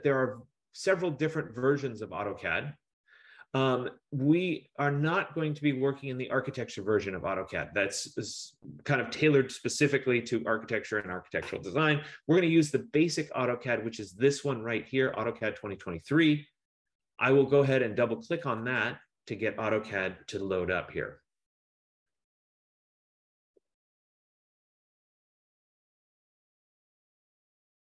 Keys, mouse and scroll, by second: 18.6 click, 18.7 F15, 18.9 click.